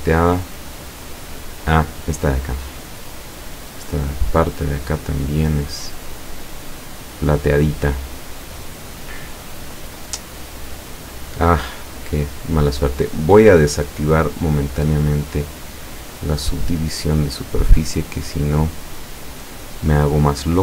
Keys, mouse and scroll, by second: 2.3-3.3 scroll up 2, 3.8-8.5 middle drag, 8.9 middle click, 9.9 scroll up 1, 10.3-11.5 middle drag, 13.1 click, 14.3 click, 15.2 scroll down 1, 15.7-19.4 middle drag.